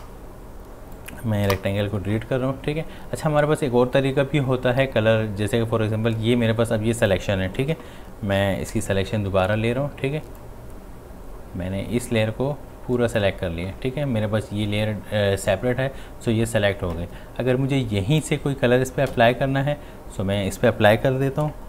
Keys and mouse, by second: 7.0 click, 7.7-10.1 typing, 10.4-15.4 drag, 19.1 click, 19.1 x.